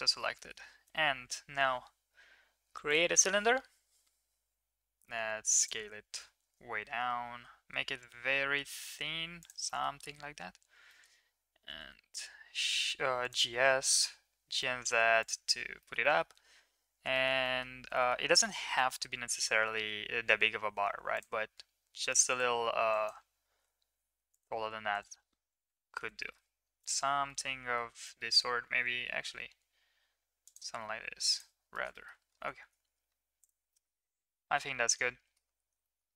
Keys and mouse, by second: 0.3 middle click, 0.6 shift+a, 0.7 shift+a, 4.0 s, 5.9 s, 9.8 middle drag, 10.9 middle click, 13.3 g, 15.7 shift+middle drag, 17.2 shift+middle click, 17.6 middle click, 18.0 shift+middle click, 19.7 Tab, 23.0 click, 23.5 g, 25.6 Tab, 26.2 middle drag, 26.8 shift+middle drag, 27.2-27.7 middle drag, 28.0 middle click, 28.7 s, 32.0 middle drag, 33.8 shift+middle drag, 34.5 shift+middle drag, 34.9-35.4 middle drag, 35.9 shift+middle click.